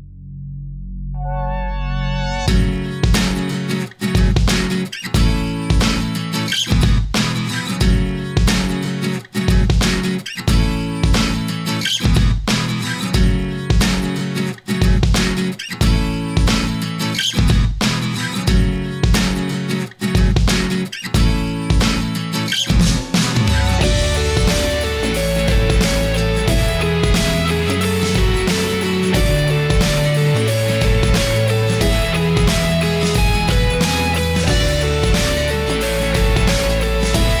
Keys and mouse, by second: 2.8-5.8 middle drag, 5.8 right click, 18.3 right click, 18.5 middle click, 18.5-19.8 right drag, 19.8 middle click, 20.0 right click, 20.0 middle click, 20.1 right click, 20.2 middle click, 20.6 right click, 20.6 middle click, 23.3-25.1 drag, 25.8 middle click, 26.4 right click, 28.0-29.7 middle drag, 30.8-32.4 right drag, 33.7 middle click, 34.6 middle click, 34.8-36.4 drag, 37.2-37.4 middle drag.